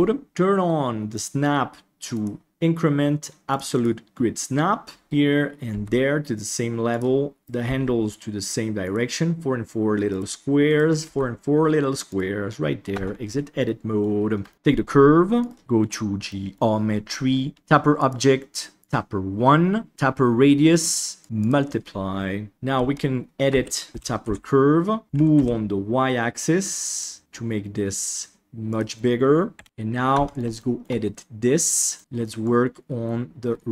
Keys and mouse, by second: 0.2 click, 1.1 click, 2.2-4.4 drag, 5.6 g, 10.0 right click, 10.6 right click, 11.0 g, 12.9 Tab, 13.6-13.9 middle drag, 14.4 shift+middle click, 15.4 drag, 15.6 middle click, 16.3 middle click, 18.0 click, 21.2 click, 22.7 Tab, 23.4 a, 23.9 g, 29.5 KP_1, 29.6 Tab, 30.1 Tab, 30.5 shift+middle click, 31.9 middle click, 32.4-33.7 drag.